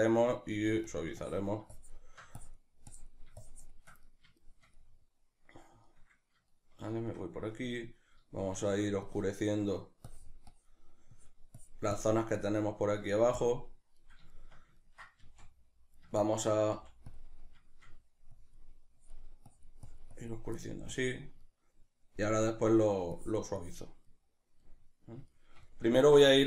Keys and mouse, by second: 0.5 f, 0.9 click, 3.5 shift+click, 4.1-9.0 middle drag, 9.0 click, 9.6 middle click, 10.1-12.8 drag, 12.8 middle click, 13.4 click, 14.0-17.2 middle drag, 16.8 f, 17.2 click, 20.6 middle click, 20.9 click, 21.4-23.2 middle drag, 23.2 click, 24.1-26.4 middle drag.